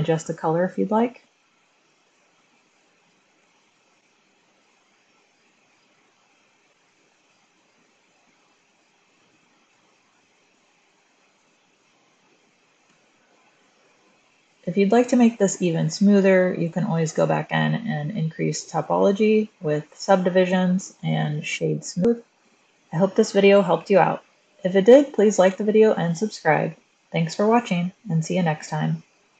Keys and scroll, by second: 11.9 Return, 11.9-12.7 typing.